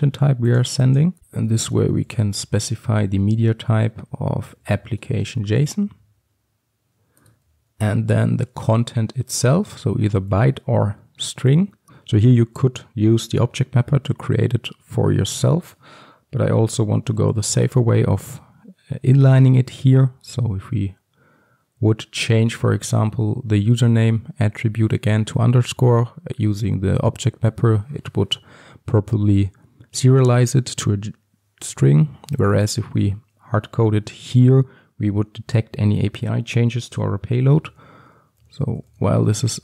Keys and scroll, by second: 1.2 Return, 5.2 Return, 5.4 ctrl+alt+l.